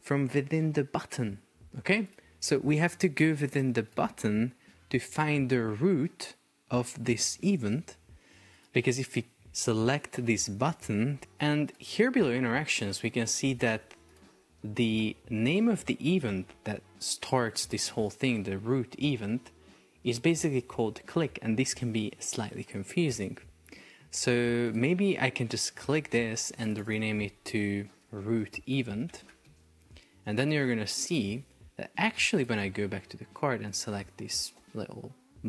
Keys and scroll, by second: 28.0 shift+r, 28.5 space, 28.8 shift+e, 29.5 Return.